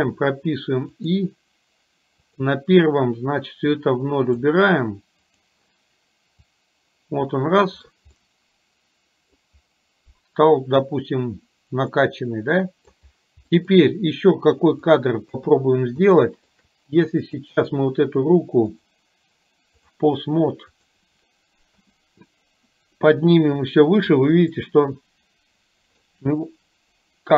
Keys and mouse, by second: 2.3 click, 3.8 click, 5.3 click, 6.6-7.7 drag, 8.3-9.5 middle drag, 12.1-13.0 middle drag, 13.6 middle click, 15.0 click, 15.3 KP_1, 16.2-16.6 middle drag, 17.2 click, 18.8-20.1 drag, 20.7 click, 21.8 g, 24.7-26.1 middle drag.